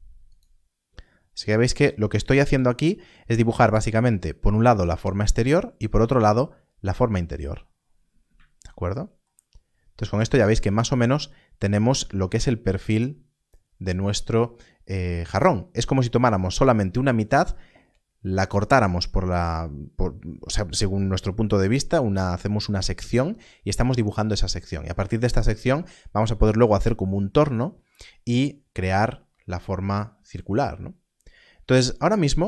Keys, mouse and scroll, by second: 0.2 ctrl+right click, 2.2 ctrl+right click, 8.2 ctrl+r, 9.5 scroll down 1.